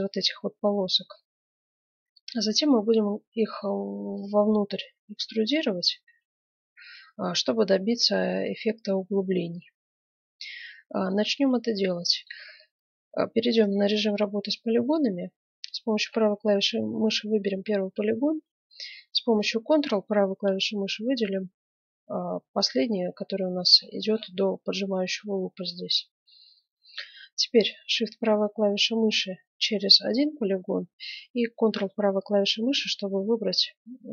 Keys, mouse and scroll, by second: 9.5-11.3 middle drag, 11.3 ctrl+Tab, 12.0 middle click, 13.5-15.4 right drag, 16.0-17.8 middle drag, 18.1-20.4 middle drag, 20.1-21.8 right drag, 23.7 middle click, 24.6-25.0 scroll down 1, 25.0-28.2 middle drag, 28.2-30.2 right drag, 31.5-33.4 right drag, 33.4-34.1 middle drag.